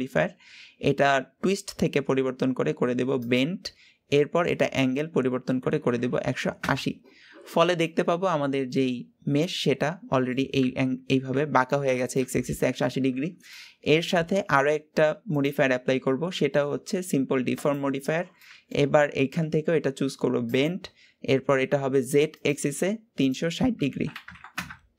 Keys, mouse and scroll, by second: 3.1 click, 4.5-7.5 drag, 7.8-10.6 middle drag, 10.6 Tab, 12.6-13.1 scroll down 2, 13.1 Tab, 13.5-15.3 middle drag, 15.3 click, 17.7 click, 18.3-20.4 middle drag, 20.4 click, 22.3 click, 23.1-24.9 drag.